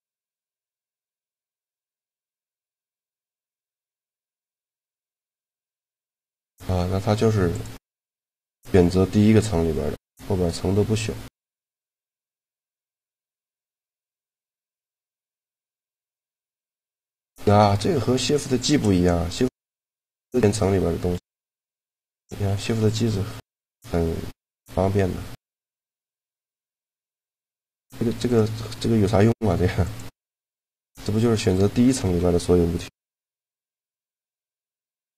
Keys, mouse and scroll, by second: 0.7 click, 0.7 a, 2.5-5.4 drag, 5.7 middle click, 7.3 click, 12.6-14.3 middle drag, 15.9-17.8 right drag, 17.4 shift+g, 21.1 g, 22.2-23.7 right drag, 22.4 shift+g, 23.5 g, 23.7 click, 25.5 click, 25.7 shift+g, 27.1 a, 28.2 click, 29.1 click, 30.3-31.9 right drag, 31.8 a, 31.9 a, 32.7 m, 35.0 a.